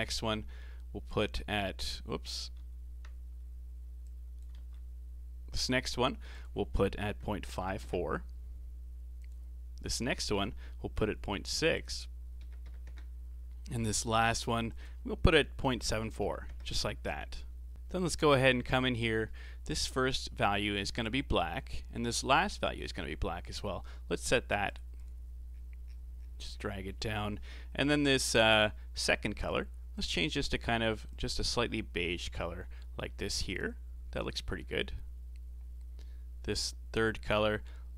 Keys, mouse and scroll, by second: 1.0-2.6 drag, 2.6 ctrl+z, 4.0-4.5 drag, 4.5 ctrl+z, 5.6-17.7 drag, 18.1-18.4 scroll up 3, 18.4 middle click, 19.0 scroll up 3, 19.2-20.8 middle drag, 20.8-21.5 scroll down 3, 21.5-22.6 middle drag, 22.6-23.5 drag, 24.7 click, 24.9 click, 29.3 click.